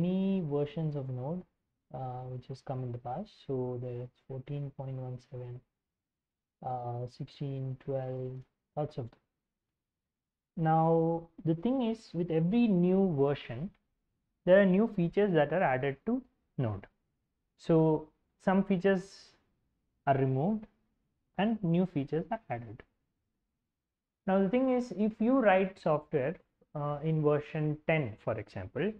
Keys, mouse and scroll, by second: 0.0 click, 1.1-1.7 scroll down 2, 1.8-2.1 scroll up 2, 2.3-3.3 scroll down 4, 4.2-5.7 scroll down 3, 7.8 shift+space, 8.1 shift+space, 8.3 shift+space, 9.6 alt+Tab.